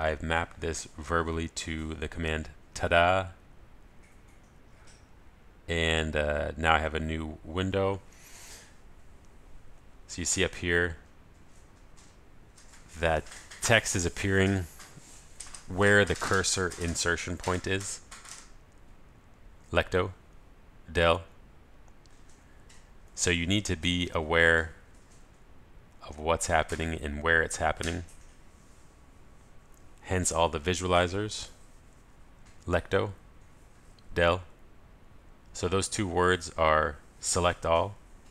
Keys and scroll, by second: 3.8 ctrl+alt+shift+super+t, 20.5 ctrl+alt+shift+super+a, 33.4 ctrl+alt+shift+super+a.